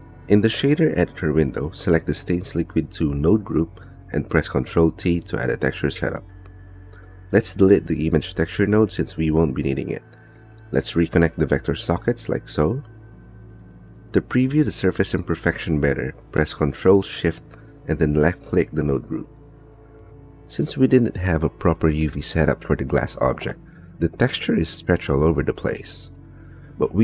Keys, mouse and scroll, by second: 1.3 click, 2.1 middle click, 3.0 middle click, 5.0 ctrl+t, 5.6 middle click, 6.6 click, 8.9 x, 10.5 g, 12.0 click, 14.4-15.5 middle drag, 16.0 middle click, 17.0 click, 20.6 shift+middle click, 21.3 middle click, 22.3 click, 22.5 click, 23.4 click, 24.1 click, 24.5 click, 25.0 click, 25.8 middle click, 25.9 click, 26.0 middle click, 26.0 click, 26.2 middle click.